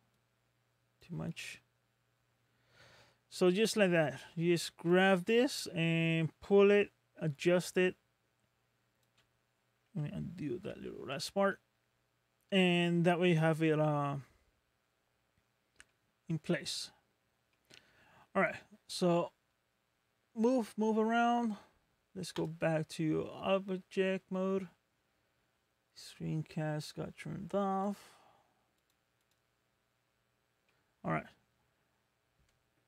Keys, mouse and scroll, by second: 0.1 click, 1.3 middle click, 4.9 click, 10.7 ctrl+z, 11.5 middle click, 13.8 middle click, 15.4 scroll down 1, 15.9 middle click, 17.2 scroll down 1, 17.5 middle click, 29.8-30.3 scroll down 1, 30.3 scroll up 2, 30.7 middle click, 31.8 scroll down 1.